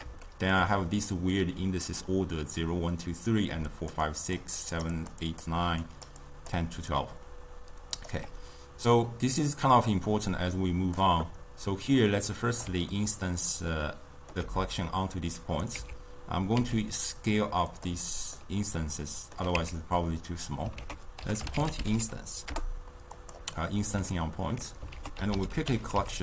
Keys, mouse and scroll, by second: 0.3-3.3 shift+middle drag, 3.6-6.9 typing, 3.7 click, 4.7 click, 5.3 click, 5.9 click, 6.2 click, 7.4 right click, 8.2 d, 8.2 d, 10.1-13.0 drag, 13.0-15.8 ctrl+middle drag, 15.8 Tab, 16.6 s, 18.4-19.7 ctrl+middle drag, 19.7 Tab, 20.8 ctrl+a, 23.6-25.0 middle drag, 25.0 ctrl+a, 25.9 l.